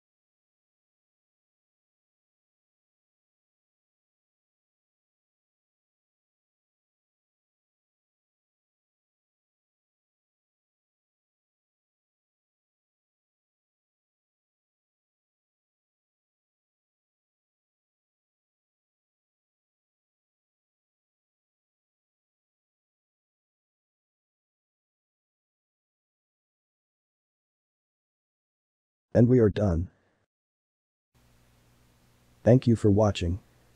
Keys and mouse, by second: 1.0 3, 1.5-2.9 middle drag, 3.6-8.4 middle drag, 8.4 click, 8.6 click, 9.0 g, 11.0 ctrl+click, 11.6 g, 13.3 3, 13.9-15.6 middle drag, 15.6 ctrl+r, 17.6-21.0 ctrl+middle drag, 22.7-25.2 ctrl+middle drag, 25.2 Tab, 25.7-30.1 middle drag, 31.9-33.7 shift+middle drag.